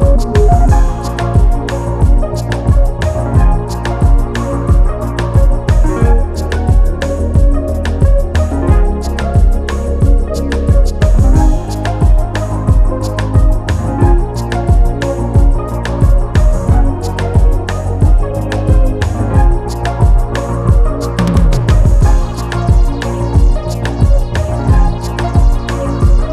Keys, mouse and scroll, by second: 0.4 click, 3.1 click, 3.3 scroll down 1, 3.6 middle click, 3.9-4.4 scroll up 1, 4.4 middle click, 4.9-7.1 drag, 8.4 middle click, 9.2-11.3 drag, 12.1-13.3 middle drag, 13.3 shift+d, 14.4 scroll down 2, 14.7 middle click, 15.4 click, 16.4-17.3 scroll up 1, 17.3 ctrl+z, 18.7 click, 20.5-21.2 scroll up 3, 21.2-21.9 scroll down 2, 21.9 s, 22.7-23.2 scroll down 1, 23.2 click, 23.7 s, 24.5 scroll down 1, 24.7 middle click, 25.3 click, 25.6-26.3 scroll up 1.